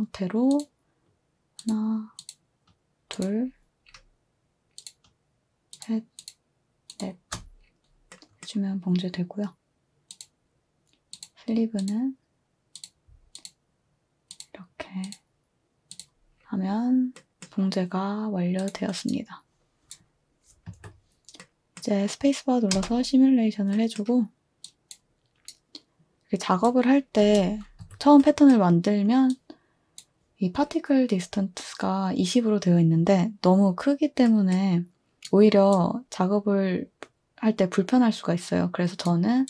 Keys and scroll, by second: 20.7 2, 22.7 space, 27.2 space, 27.8 space.